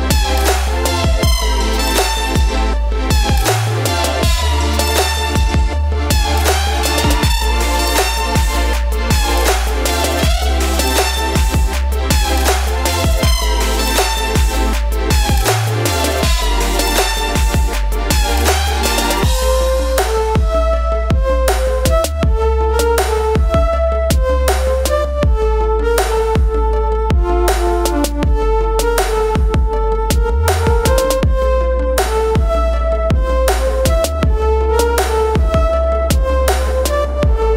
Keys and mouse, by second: 7.4 click, 11.1 click, 15.2-15.6 typing, 17.0 Return, 19.1 click, 19.7 click, 21.8 ctrl+j, 22.7 click, 26.7 click, 30.8 click, 36.7 click.